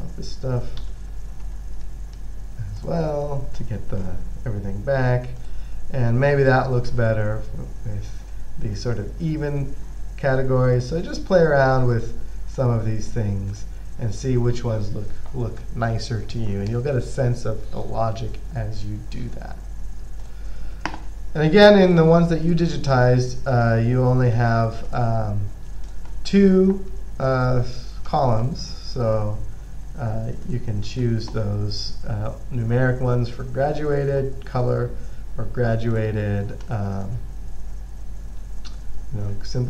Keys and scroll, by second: 1.3-2.1 typing.